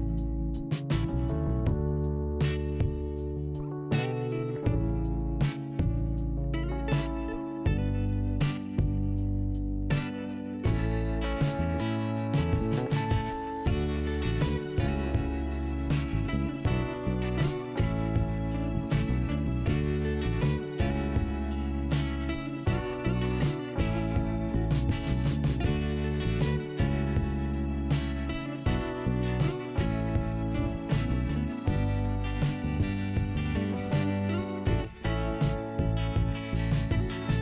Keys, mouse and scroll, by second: 0.1 click, 0.2 click, 0.9 click, 1.0 click, 1.5 right click, 1.6 right click, 2.3 click, 2.5 click, 4.2 click, 4.3 click, 4.8 click, 4.9 click, 5.1 click, 6.6 click, 7.4 click, 7.5 click, 7.6 click, 7.7 click, 9.0 click, 9.1 click, 10.1 click, 10.2 click, 10.4 click, 13.3 click, 13.7 scroll down 1, 14.8 scroll down 1, 15.5-15.9 scroll up 1, 16.9 click, 18.9 right click, 19.0 right click, 20.1 click, 20.2 click, 21.0 t, 22.0-24.2 scroll up 1, 24.2 click, 25.8 scroll down 1, 26.2 click, 26.3 scroll down 1, 26.4 click, 26.5 click, 26.9 scroll down 1, 28.2 l, 30.0 click, 30.0 p, 32.4 scroll up 1, 33.7 click, 33.8 click, 34.5 click, 34.6 click, 36.4 scroll up 1.